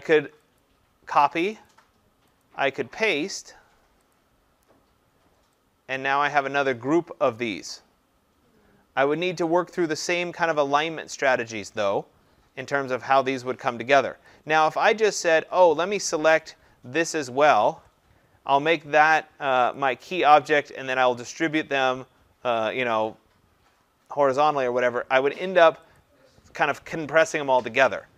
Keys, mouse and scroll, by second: 0.6 click, 2.4 click, 4.2 click, 9.1 click, 14.3 click, 17.2 shift+click, 19.8 click, 26.0 click.